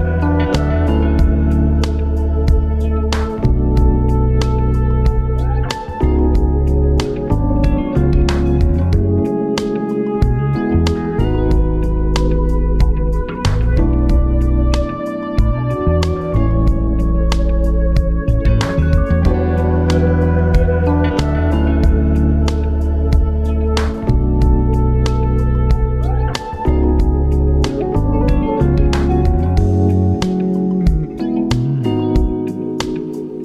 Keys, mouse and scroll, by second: 1.9-3.9 drag, 3.9 KP_1, 6.4-8.8 shift+middle drag, 10.8 r, 14.3 click, 16.3 right click, 16.9-19.1 middle drag, 19.4-21.7 middle drag, 22.1 right click, 24.9 middle click, 25.8 shift+right click, 26.7 x, 28.0-28.9 scroll down 5, 28.9-31.1 middle drag, 31.1 KP_3, 31.8 scroll up 4, 32.7-33.4 shift+middle drag.